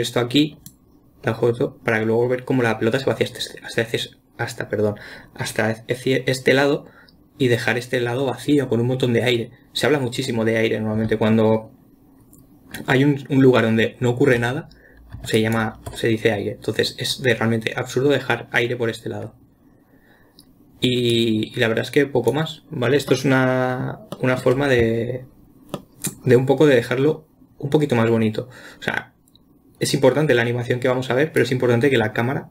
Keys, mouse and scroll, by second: 15.8 ctrl+click, 21.6-23.5 drag, 23.5-31.8 middle drag, 31.8 click.